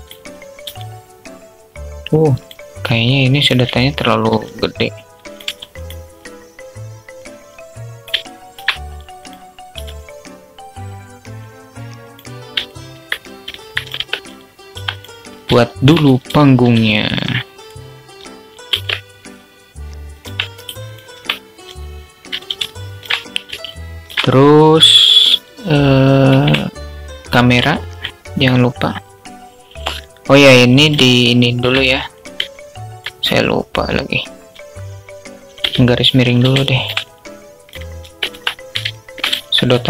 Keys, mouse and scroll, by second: 2.7 click, 3.1 middle click, 3.2 alt+click, 6.6 click, 7.6-7.9 alt+shift+drag, 8.4 click, 9.1 s, 12.0-12.5 alt+middle drag, 13.0 alt+click, 13.1 middle click, 13.3 Tab, 13.7 2, 14.1 click, 14.9 alt+shift+click, 16.9 click, 18.0 ctrl+b, 19.6 Tab, 20.1 right click, 21.6 alt+z, 22.1 alt+shift+click, 23.1 alt+shift+drag, 25.5 shift+a, 30.5 shift+click, 30.6-31.0 alt+shift+middle drag, 31.8-32.3 middle drag, 36.3-37.0 alt+drag, 37.6 Tab, 38.3 alt+shift+click, 39.1 s.